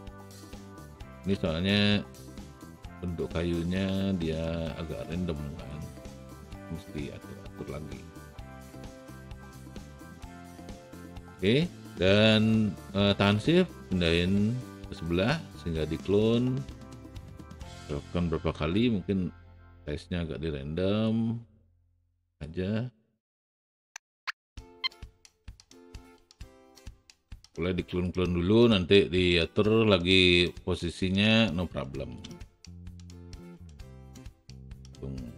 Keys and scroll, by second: 1.3 alt+e, 2.5 r, 8.6 w, 18.5 r, 23.6 w, 24.5 e, 25.4 alt+w, 26.2 r, 26.5 w, 32.5 alt+shift+w.